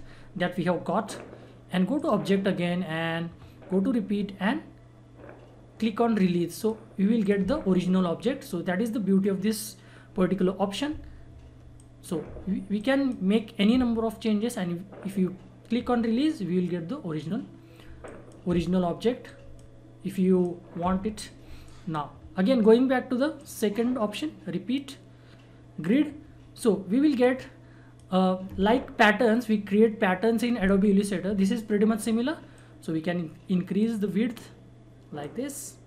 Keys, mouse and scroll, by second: 1.9 click, 6.5 click, 11.7 click, 18.0 click, 20.6 click, 25.8-30.6 drag, 32.5-35.8 drag.